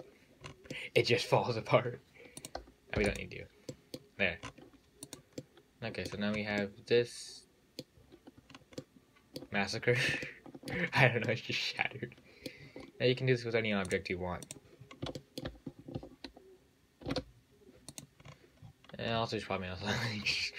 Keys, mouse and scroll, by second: 0.7 scroll up 5, 1.0-1.8 middle drag, 1.8 scroll down 4, 2.1-2.7 scroll up 1, 2.7 click, 3.2 x, 3.9-4.5 middle drag, 4.5 scroll down 2, 4.7-5.3 scroll up 2, 5.3 click, 5.7-6.5 middle drag, 6.5-6.9 scroll up 5, 6.9-8.3 middle drag, 8.3-8.8 scroll down 5, 8.8 scroll up 2, 9.1 middle click, 9.8-10.1 scroll down 7, 10.1-10.5 scroll up 3, 10.5-11.2 shift+middle drag, 11.2-11.5 scroll up 6, 11.5-12.9 middle drag, 12.9-14.1 scroll down 7, 14.1 click, 14.7 click, 15.0-15.4 scroll down 5, 15.4-17.3 shift+middle drag, 17.3 shift+a, 18.2 click, 18.5 scroll up 3, 18.8-20.0 scroll down 12, 20.0 scroll up 1, 20.2-20.5 scroll down 35.